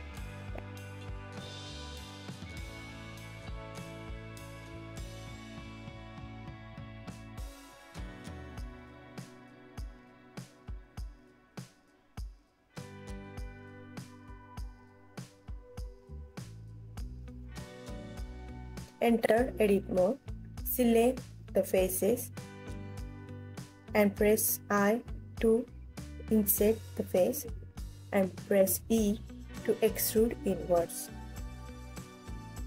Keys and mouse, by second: 0.3 y, 1.7 Escape, 2.2 s, 2.4 x, 4.0-4.3 drag, 4.6-5.4 alt+drag, 5.8 s, 7.4 click, 7.7 s, 8.3 click, 8.9 KP_3, 9.6 KP_1, 10.3 s, 10.9 click, 11.7 KP_3, 12.5 KP_1, 13.8 s, 14.1 x, 15.6 click, 15.9 g, 16.9 click, 17.5 ctrl+s, 17.9-18.7 alt+drag, 19.1 click, 19.8 Tab, 22.4 click, 23.6 click, 25.4 i, 27.0 click, 27.9 alt+click, 29.6 middle click, 30.9 e, 32.0 click, 32.5 e.